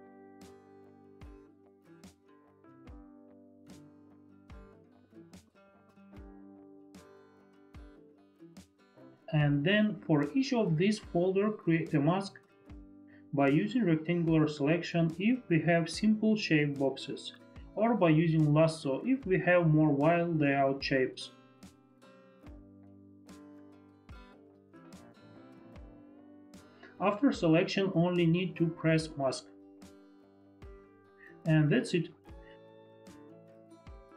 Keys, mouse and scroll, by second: 0.4 click, 2.3 click, 2.7 Caps_Lock, 3.8 Return, 4.2 ctrl+j, 4.8 ctrl+j, 5.9 click, 6.2 click, 6.7 click, 7.0 Return, 7.2 click, 8.7 click, 9.6 click, 10.4 click, 11.2 ctrl+z, 11.2 click, 11.8 click, 12.3 click, 12.6 ctrl+z, 12.6 click, 13.4 click, 14.2 click, 15.9 click, 16.7 ctrl+d, 18.2 ctrl+d, 24.7 shift+click, 30.2 shift+F4, 32.7 ctrl+d, 33.0 click.